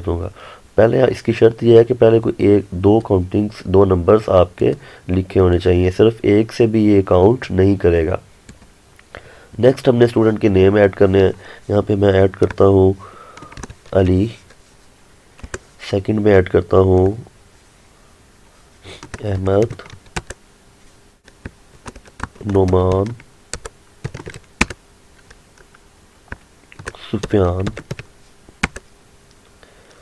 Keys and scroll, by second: 15.5 Return, 20.3 Return, 24.7 Return, 28.7 Return.